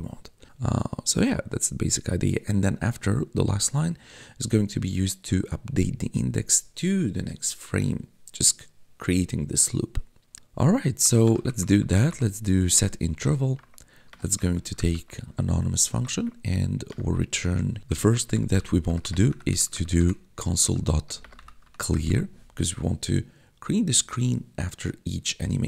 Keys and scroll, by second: 10.6-22.2 typing, 12.6 Tab.